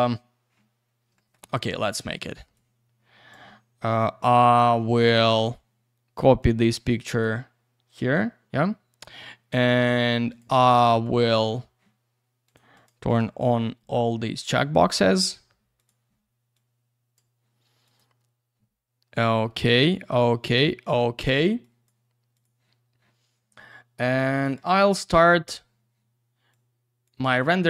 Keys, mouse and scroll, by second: 1.1 middle click, 2.5 click, 5.3 click, 6.4 click, 10.3 click, 11.0 click, 12.5 click, 12.7 click, 12.8 double click, 13.1 click, 14.0 click, 15.7 click, 16.5 click, 17.8 click, 19.2 click, 20.4 click, 21.6 click, 22.3 click, 24.3 click, 26.5 click.